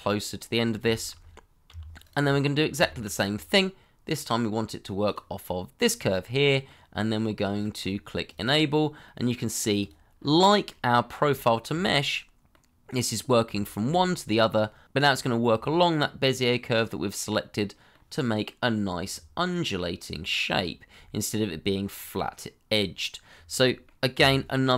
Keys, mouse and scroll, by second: 0.4-0.8 scroll down 1, 0.8 shift+middle click, 1.6 g, 2.8 shift+middle click, 6.4 middle click, 7.4-9.0 scroll up 1, 9.0 middle click, 10.1-10.5 scroll up 1, 10.5 middle click, 11.4 shift+middle click, 11.8 middle click, 13.6 shift+middle click, 14.9 middle click, 18.2 middle click, 19.5-20.0 scroll down 1, 23.3 scroll down 1, 23.6 middle click, 24.1 g.